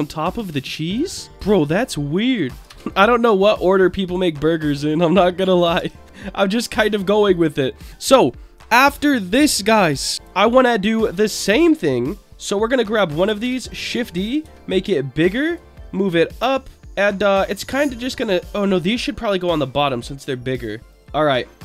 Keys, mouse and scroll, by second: 0.3 click, 1.2 click, 1.8 click, 2.7 shift+d, 2.9 click, 3.5 click, 4.6 click, 5.7 Tab, 6.0-7.5 middle drag, 12.3 Tab, 13.4 shift+d, 13.9 click, 14.4 s, 15.4 click, 15.7 click, 16.7 middle click, 17.6-20.3 drag, 20.9 click.